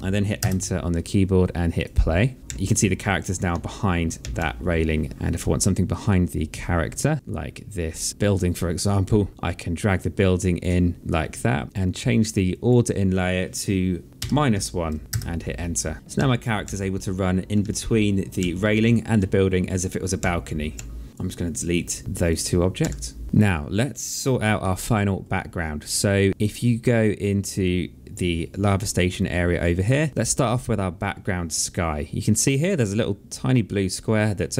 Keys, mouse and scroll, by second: 0.5 Return, 0.5 KP_Enter, 1.8 click, 2.4 Right, 2.5 Left, 3.6 Right, 4.3 Left, 5.1 click, 8.2 click, 12.6 click, 14.3 KP_Subtract, 14.6 KP_1, 15.2 Return, 15.2 KP_Enter, 16.3 Right, 16.7 Left, 17.7 Right, 18.5 Left, 19.3 Right, 20.2 Right, 22.0 Delete, 22.4 click, 22.9 Delete, 24.4 alt+middle click, 30.1 click.